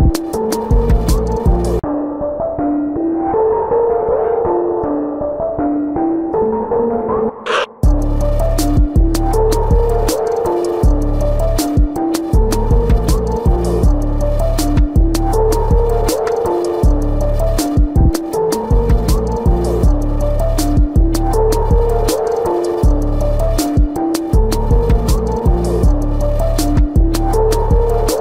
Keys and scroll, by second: 0.7 space, 1.2 space, 2.1 ctrl+-, 2.4 space, 2.7 ctrl+-, 2.8 space, 3.0 ], 4.1-6.6 typing, 6.9 ctrl+=, 7.8 ctrl+-, 9.4 space, 10.9 space, 12.6 space, 14.5 space, 15.6 ctrl+alt+z, 16.2 space, 19.1 space, 20.2 space, 21.1 space, 23.3 space, 25.5 space, 27.3 ctrl+-, 28.0 ctrl+=.